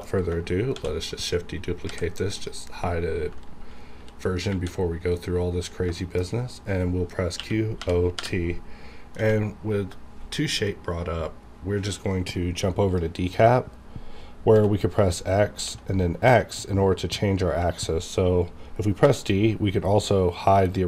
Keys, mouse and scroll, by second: 0.7 shift+d, 1.1 right click, 1.9 h, 2.4 click, 3.9 KP_4, 4.5 KP_7, 5.2-5.9 scroll up 1, 6.0 shift+middle click, 6.2 shift+scroll up 1, 7.4-9.2 typing, 12.6-14.5 drag, 14.5 x, 19.0 d.